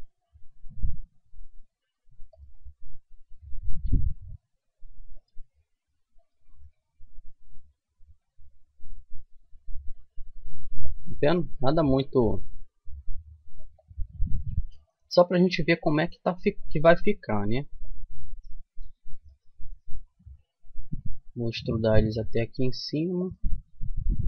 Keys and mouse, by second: 3.3-5.1 right drag, 3.7 g, 6.2-8.1 right drag, 6.5 g, 11.4-13.2 right drag, 11.8 g, 15.8-17.7 right drag, 16.9 g, 19.1-20.3 right drag, 20.9 e, 24.0 s.